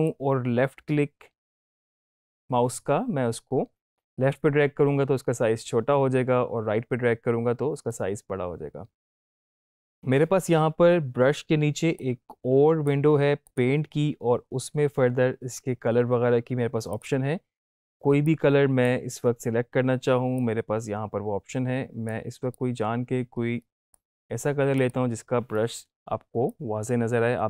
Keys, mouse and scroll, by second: 0.0-9.1 ctrl+drag, 11.9-12.8 drag, 16.8-18.8 drag.